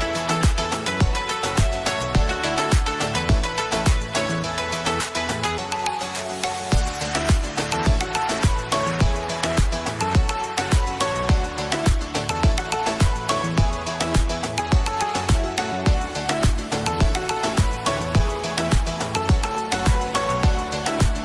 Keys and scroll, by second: 2.1 ctrl+c, 4.5 ctrl+v, 16.8 ctrl+v.